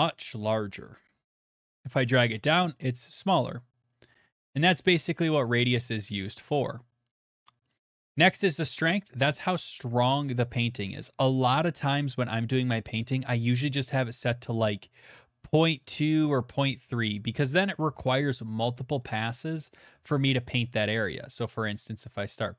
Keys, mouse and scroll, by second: 0.2 click, 0.4 click, 0.5 click, 0.9 click, 2.0 click, 4.6 click, 5.6 click, 7.6 middle click, 11.1 middle click, 11.9 click, 16.2 click, 16.9 middle click, 17.0 middle click, 17.0 middle click, 17.6 middle click, 18.1-18.5 shift+middle click, 18.5 middle click, 18.9 shift+middle click, 19.2 middle click, 19.4 shift+click, 19.6 shift+middle click, 22.2 shift+middle click.